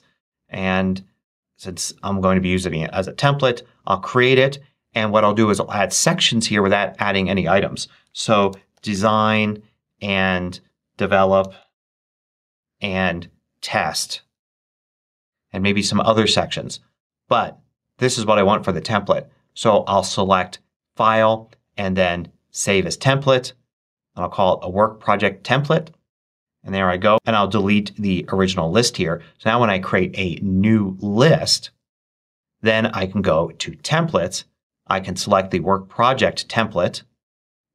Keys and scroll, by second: 7.7-9.3 typing, 11.0-12.7 typing, 14.3-15.2 typing.